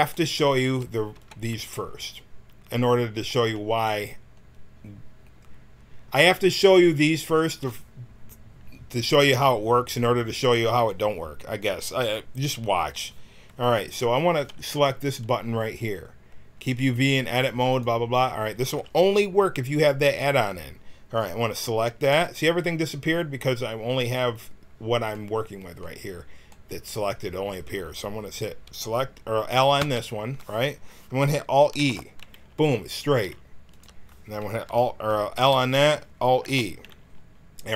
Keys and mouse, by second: 0.6 a, 1.1 b, 29.8 l, 31.8 alt+e, 33.1 g, 35.4 l, 36.4 alt+e.